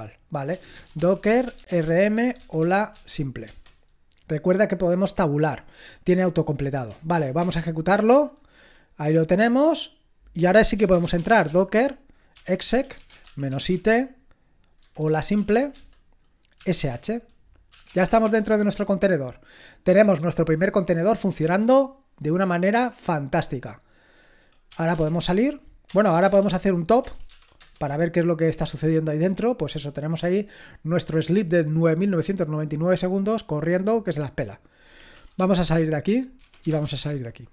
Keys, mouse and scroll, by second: 0.3-3.1 typing, 3.5 Return, 7.1 ctrl+p, 7.9 Return, 10.5-18.6 typing, 24.5-27.8 typing, 35.1-37.3 typing.